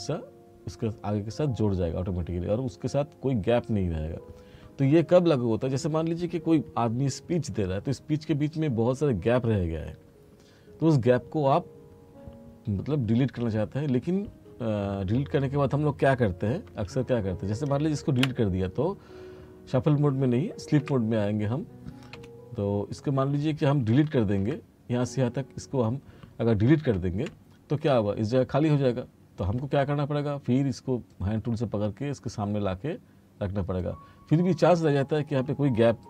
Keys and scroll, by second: 16.8 ctrl+z, 18.3 Delete, 20.9 F1, 22.2 F2, 27.0 Delete.